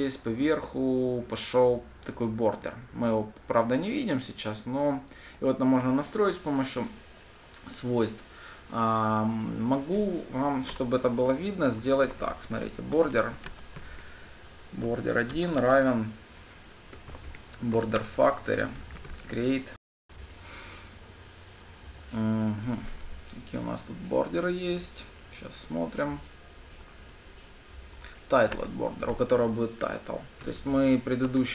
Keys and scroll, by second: 15.4 Return, 17.7 Return, 29.0 Return.